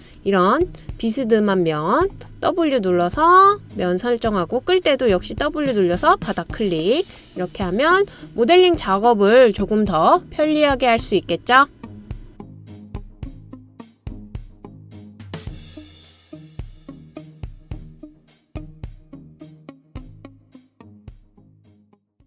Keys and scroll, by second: 0.4 typing, 5.3 typing.